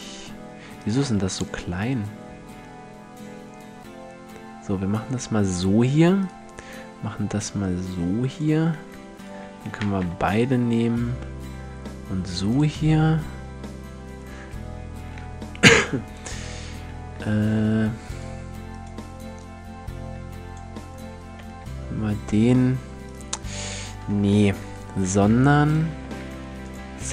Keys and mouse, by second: 0.8 s, 1.4 click, 6.3 s, 7.5 middle click, 9.3 s, 10.5 click, 12.2-14.1 drag, 16.0-19.0 right drag, 16.8 g, 19.0 middle click, 21.2 g, 24.0 ctrl+z, 25.6 w, 26.4 click.